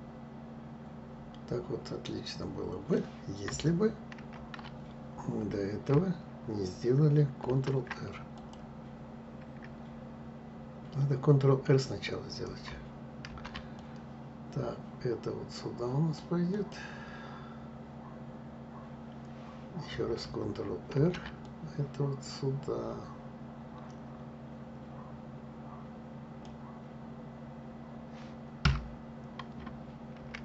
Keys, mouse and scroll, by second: 4.2 ctrl+z, 7.5 shift+r, 8.4 click, 13.3 ctrl+r, 21.0 ctrl+r, 30.2 ctrl+z.